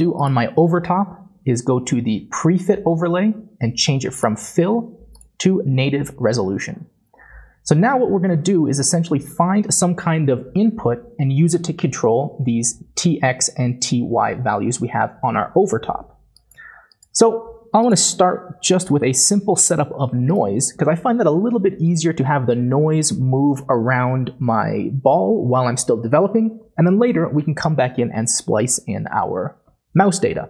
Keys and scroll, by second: 18.7-19.5 typing.